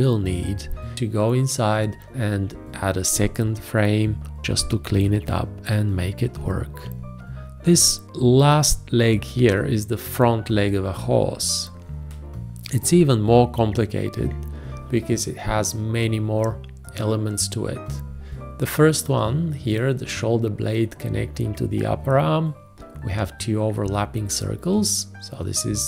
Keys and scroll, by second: 7.2 space.